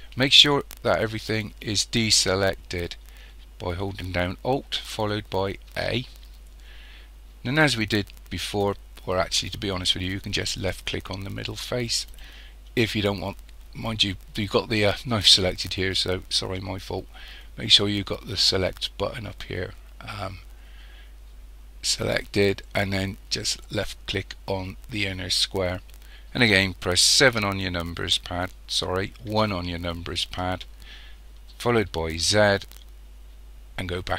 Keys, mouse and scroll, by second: 5.7 alt+a, 9.8 middle click, 10.6-12.2 drag, 12.2 right click, 17.4 click, 23.6 click, 27.2 KP_7, 29.3 KP_1, 32.2 z.